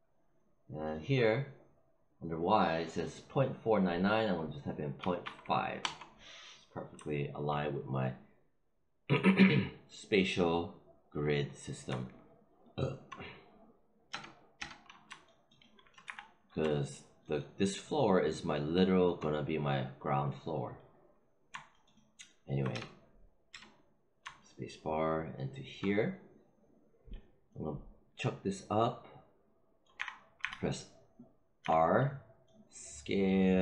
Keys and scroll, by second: 4.9 ., 5.1 5, 5.7 Return, 14.0 space, 15.9 f, 22.6 space, 29.9 r, 31.6 r.